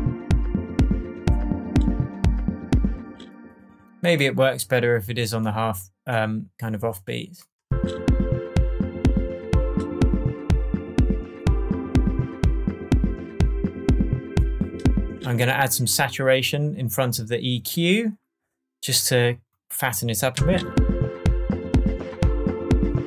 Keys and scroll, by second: 2.9 space, 7.6 space, 15.0 space, 20.3 space.